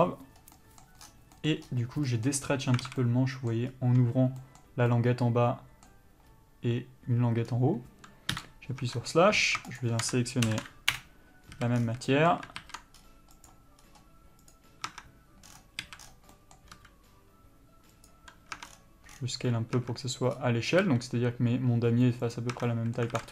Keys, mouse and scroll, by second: 3.0 alt+a, 7.7-8.5 scroll down 1, 8.5 KP_Divide, 9.1 Tab, 10.0 shift+click, 11.2 Return, 11.8 a, 12.0 scroll down 1, 12.1 a, 12.3 middle click, 13.9 ctrl+z, 14.0 scroll up 1, 14.7 click, 15.1 Tab, 16.0 a, 16.9 s, 18.8 Tab, 18.9 scroll down 1, 20.0 Tab, 21.1 s, 22.7 Tab, 22.9 middle click.